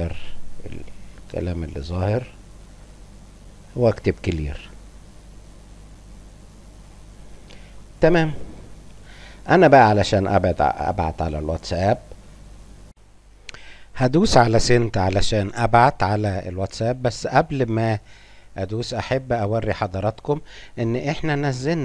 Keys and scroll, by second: 4.6 Return, 5.0 Scroll_Lock, 5.8 BackSpace.